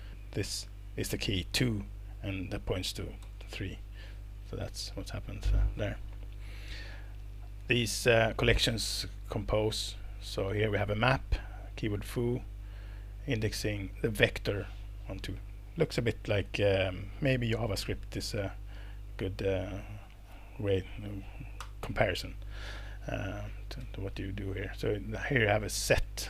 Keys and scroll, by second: 3.2 alt+Return, 4.6 Escape, 21.6 alt+Return, 23.8 Escape, 25.8 Left, 26.0 Left.